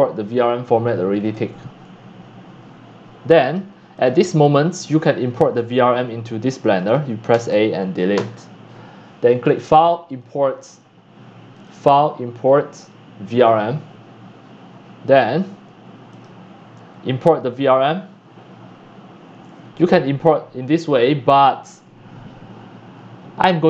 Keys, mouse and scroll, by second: 0.2 click, 0.7 click, 1.2 click, 2.2 drag, 3.1 click, 4.8 click, 5.4 click, 6.7 click, 7.3 a, 8.1 Delete, 8.7 click, 9.4 click, 10.1 click, 10.8 click, 11.5 click, 12.5 click, 13.3 click, 16.1 click, 16.7-19.5 drag.